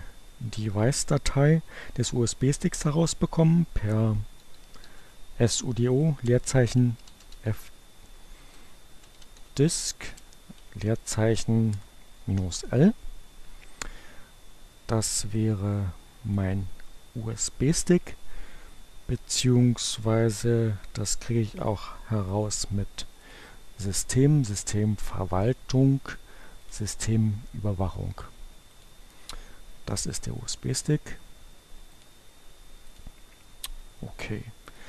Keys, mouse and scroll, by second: 3.2-7.0 typing, 8.3-9.8 typing, 10.9 l, 11.2 Return, 15.0-16.6 drag, 23.3 click, 26.9 click, 28.8 click, 31.5-32.5 drag, 32.8 click, 34.7 click.